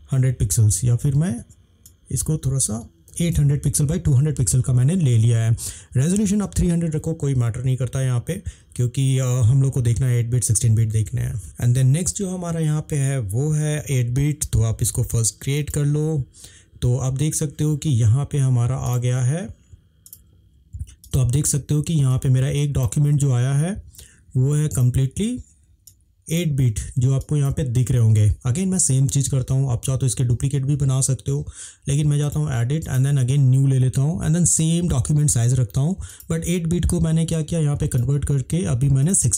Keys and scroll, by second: 2.9-3.9 typing.